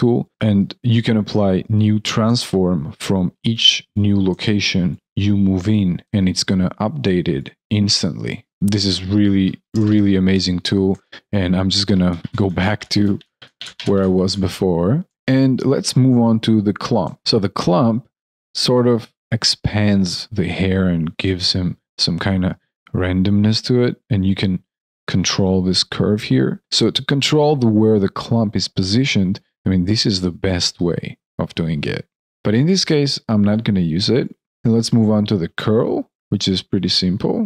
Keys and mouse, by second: 2.2 alt+click, 4.2 alt+click, 5.9 alt+click, 8.5 alt+click, 10.9 ctrl+z, 14.6 alt+click, 15.1 ctrl+z, 17.0 alt+click, 26.6 alt+click, 32.7 ctrl+z, 34.6 alt+click, 35.4 alt+middle click, 35.7 alt+click.